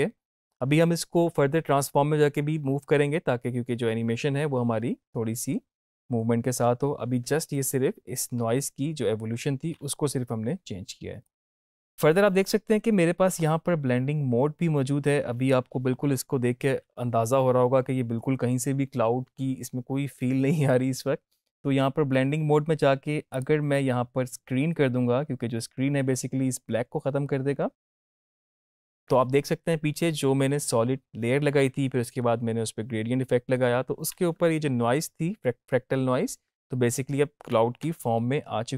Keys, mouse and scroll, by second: 5.9 space, 11.1-11.6 drag, 25.3 click, 27.8 click, 37.7 space.